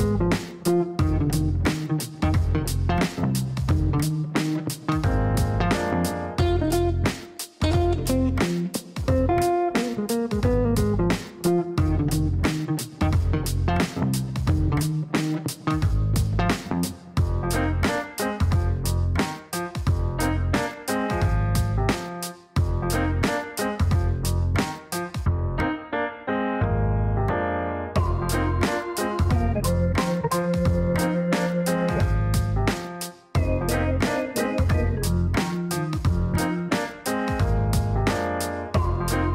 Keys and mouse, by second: 0.0-2.3 typing, 2.4 Up, 3.1 Return, 4.8 click, 6.0 click, 7.3 click, 8.4 click, 9.7 click, 11.5 click, 12.0 click, 12.7 click, 16.1-18.6 typing, 18.6 Up, 19.6 Return, 21.1 click, 24.0 middle click, 25.7 click, 26.3 middle click, 27.6 click, 28.1 click, 29.2 click, 29.6 middle click, 31.8 click, 32.8 click, 34.3 click, 36.5 click.